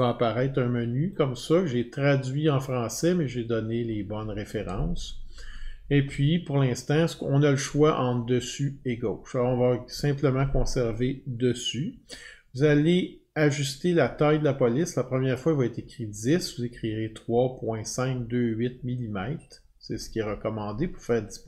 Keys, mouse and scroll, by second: 9.9 click.